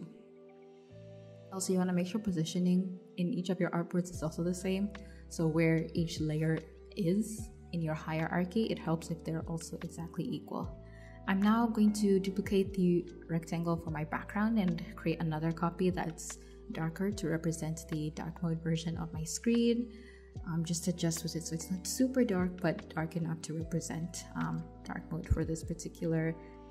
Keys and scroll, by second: 7.7 super+c, 8.3 super+v, 11.2 super+z, 14.1 super+[, 14.8 [, 16.2 [.